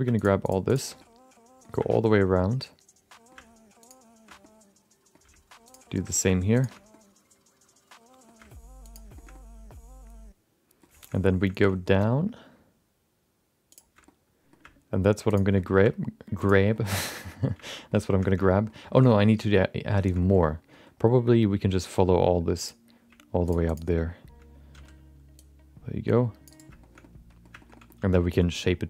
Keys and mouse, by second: 0.2 shift+click, 0.9 middle click, 2.1-3.3 middle drag, 4.4 middle click, 5.9 shift+middle click, 6.1 middle click, 6.5 shift+click, 6.9-8.2 middle drag, 8.9 ctrl+shift+click, 9.1 shift+middle click, 9.3-10.8 middle drag, 11.1 middle click, 11.5 shift+middle click, 13.7 ctrl+shift+click, 14.0 middle click, 15.3 ctrl+shift+click, 15.5 middle click, 16.7 shift+middle click, 16.9 middle click, 17.2 shift+middle click, 17.3 middle click, 17.8 middle click, 18.2 shift+middle click, 18.4 middle click, 18.9 shift+middle click, 19.1 middle click, 19.5 middle click, 20.0 shift+middle click, 20.1 middle click, 20.7 middle click, 22.6 shift+click, 23.4 shift+click, 24.7 c, 26.8 shift+middle click, 27.0 middle click, 27.5 shift+middle click, 27.7 middle click, 27.9 c.